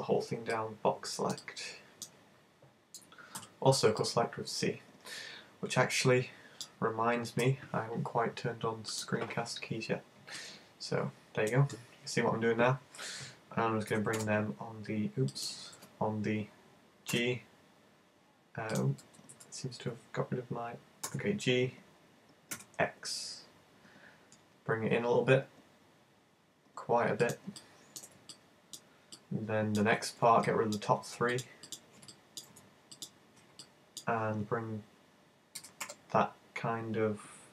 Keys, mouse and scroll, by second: 10.5 middle click, 13.9 f, 14.2 y, 15.4 click, 15.8 z, 17.2 g, 18.8 click, 19.0 super+z, 19.3 super+z, 21.1 g, 27.4 click, 27.6 right click, 28.4 middle click, 29.2 middle click, 30.6 middle click, 31.4 shift+right click, 31.7 shift+right click, 32.1 middle click, 33.0 shift+right click, 33.6 middle click, 35.6 g.